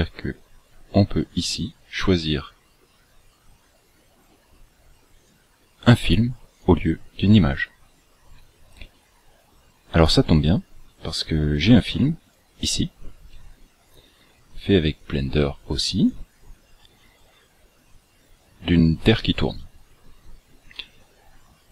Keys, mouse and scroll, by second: 5.3 click, 6.6 click, 8.0 click.